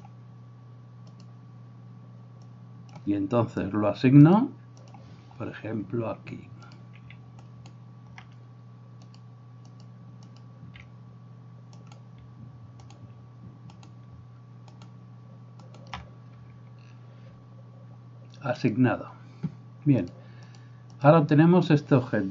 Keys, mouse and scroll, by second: 1.2-9.4 drag, 7.4 alt+right click, 9.8 click, 10.3-13.8 drag, 11.8 alt+right click, 12.9 alt+shift+right click, 13.8-15.0 alt+shift+middle drag, 15.0 alt+shift+click, 15.7 alt+shift+middle click, 16.1-22.3 drag.